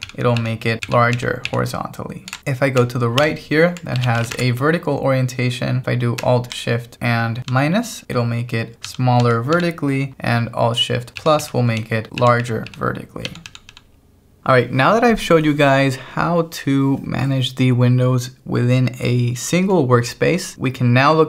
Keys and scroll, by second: 3.2 alt+l, 3.8-4.7 typing, 7.5 alt+shift+-, 11.2 alt+shift+=, 13.3 alt+shift+-, 14.4 k.